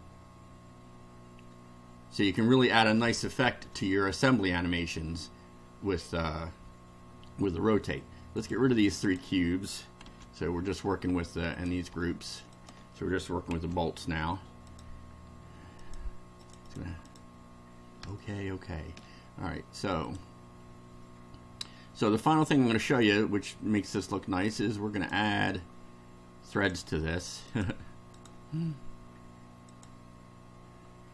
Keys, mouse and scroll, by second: 8.4 click, 9.0 shift+click, 10.0 Delete, 11.5 click, 12.5 shift+click, 13.5 Delete, 14.7 click, 15.8 click, 16.4 click, 17.0 click, 18.1-19.2 shift+middle drag, 20.1 click, 22.9 click, 24.4 click, 25.0 click, 26.5 click, 27.5 click, 28.1 click, 29.7 click.